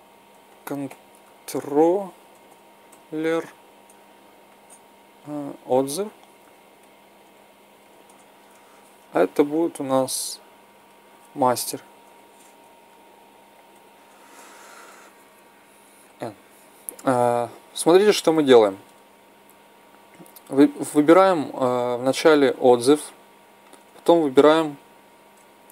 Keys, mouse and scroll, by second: 2.4 l, 9.6-11.4 right drag, 11.5-12.6 drag, 15.9 n, 20.3-25.7 drag.